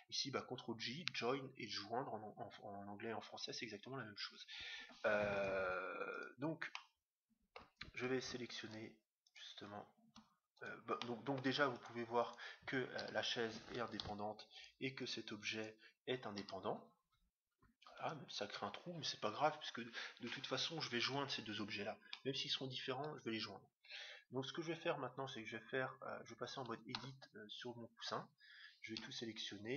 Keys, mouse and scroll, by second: 5.3-7.7 right drag, 6.7-8.4 middle drag, 8.5 middle click, 8.6-14.1 right drag, 10.9-12.7 middle drag, 13.0 g, 14.5-17.1 right drag, 16.4 g, 22.1-23.6 middle drag, 23.9 middle click, 27.0 Tab, 28.9 a.